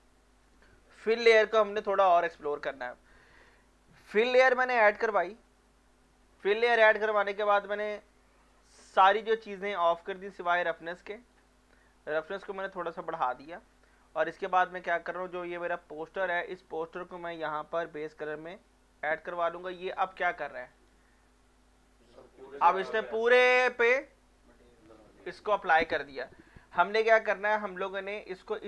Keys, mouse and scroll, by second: 3.9 click, 9.8-15.7 drag, 16.0-19.2 drag, 19.2 scroll up 1, 20.8-25.2 alt+drag, 26.5 alt+click, 27.2 alt+middle click, 27.7 scroll up 1, 28.0 alt+middle click, 28.4 scroll up 1.